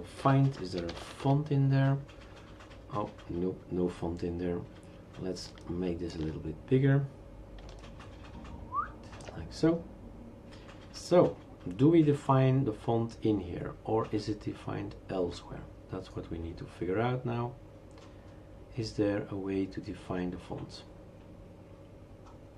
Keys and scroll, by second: 0.2 ctrl+f, 0.3-1.5 typing.